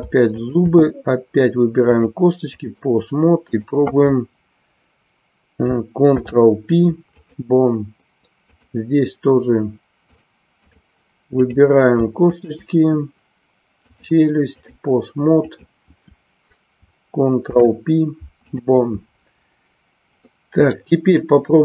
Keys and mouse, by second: 0.5 shift+click, 1.8-2.8 drag, 8.5 click, 10.2 click, 11.5 click, 12.2 shift+click, 13.9 click, 15.3 click, 20.3 middle click.